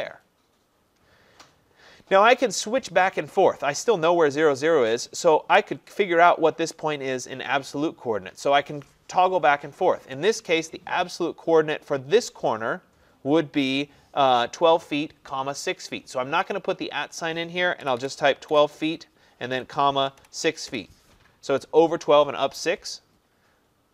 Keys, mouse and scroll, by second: 17.9-18.6 typing, 19.6-20.7 typing.